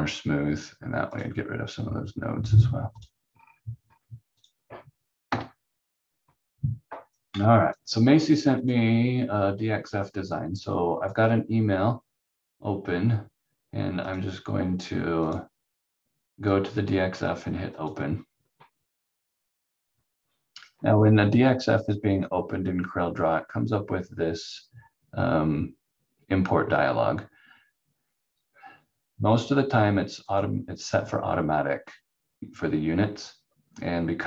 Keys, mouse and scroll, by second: 3.3 scroll down 1, 5.3 F4, 7.1 click, 30.2 click.